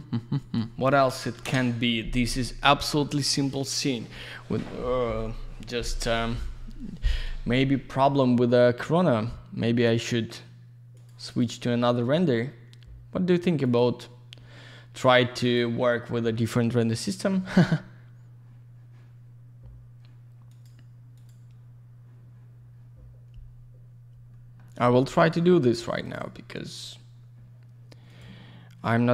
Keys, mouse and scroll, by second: 0.3 click, 0.5 click, 1.3 ctrl+shift+Escape.